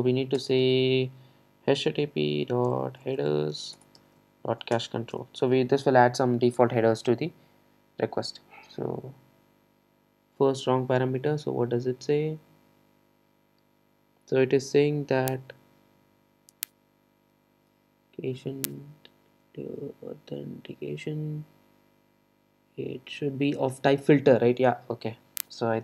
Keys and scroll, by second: 0.4 Return.